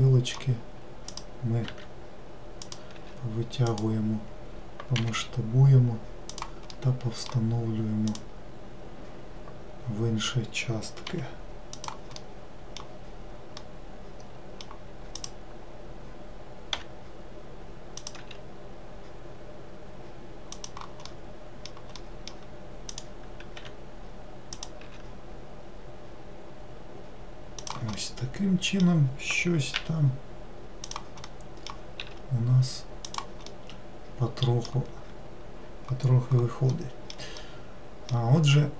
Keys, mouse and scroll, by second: 1.1 click, 1.7 e, 2.9 s, 5.0 g, 6.7-8.1 middle drag, 8.1 click, 12.2 middle click, 13.0-13.5 scroll down 1, 13.5-15.2 middle drag, 15.2-16.7 drag, 16.7 e, 18.2 s, 21.1-22.9 middle drag, 22.9 click, 23.5 e, 24.8 5, 27.9-29.8 middle drag, 29.8 e, 31.2 middle click, 32.0 s, 33.5-36.5 middle drag, 36.7-38.7 middle drag.